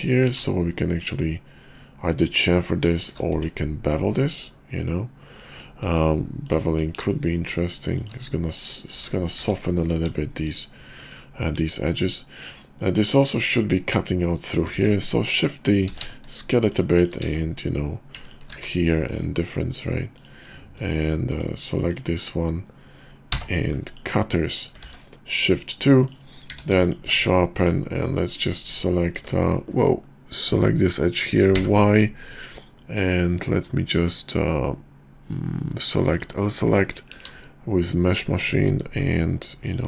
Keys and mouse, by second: 0.2 ctrl+b, 3.3 Tab, 3.9-5.4 drag, 5.9 Tab, 6.9 ctrl+b, 8.3 click, 8.9 Tab, 9.4 `, 10.2 shift+middle click, 10.6 middle click, 11.6 KP_5, 14.7 shift+d, 15.9 s, 17.0 shift+click, 18.2 shift+click, 18.9 q, 20.1-21.4 drag, 23.3 m, 24.8 shift+2, 25.3 click, 25.3 middle click, 25.5 click, 26.4 q, 27.1 Tab, 28.5 click, 30.4 click, 31.4 y, 36.6 click, 37.1 ctrl+b.